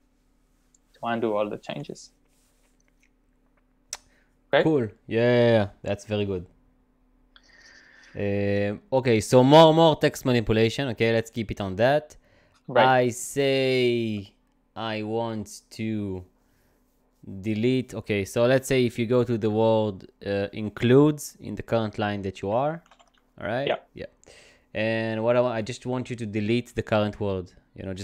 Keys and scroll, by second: 22.2-23.4 typing.